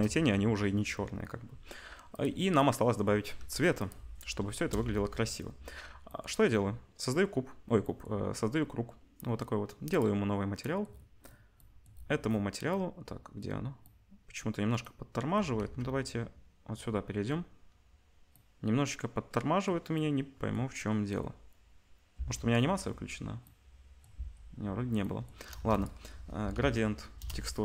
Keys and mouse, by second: 2.2-2.9 middle drag, 3.4 g, 4.5 KP_0, 4.9 ctrl+s, 4.9-15.5 ctrl+middle drag, 9.9-27.6 drag, 9.9-15.5 right drag, 15.5 z, 23.3 space, 24.1 space, 25.5 shift+a.